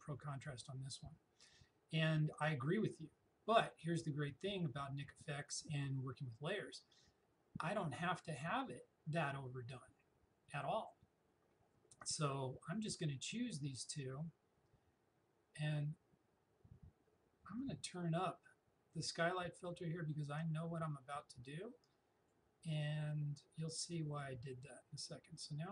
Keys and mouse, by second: 17.6-24.8 drag.